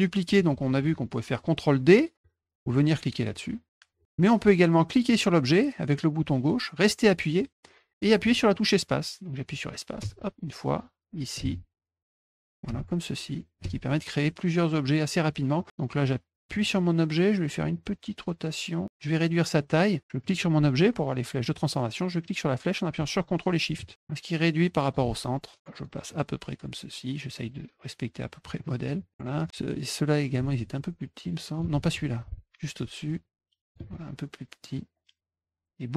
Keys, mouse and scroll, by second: 5.0-15.1 drag, 10.0 space, 11.3 space, 12.1 space, 13.6 space, 16.5 click, 17.7 click, 20.2 click, 22.2-24.9 drag, 25.5 click, 26.1 click, 26.9 click, 30.5-31.6 ctrl+shift+drag, 32.2 click, 33.0 ctrl+shift+click, 34.7-35.9 drag.